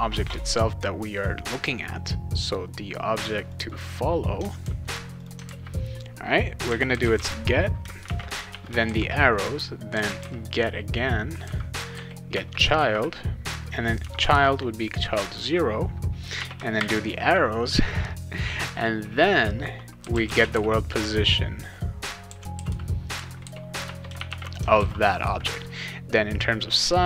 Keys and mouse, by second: 3.5 click, 3.7 click, 4.6 ctrl+c, 5.2 click, 5.5 ctrl+v, 6.4-12.7 typing, 14.0 0, 16.3 -, 16.8 shift+., 19.7-24.8 typing, 24.8 ctrl+s.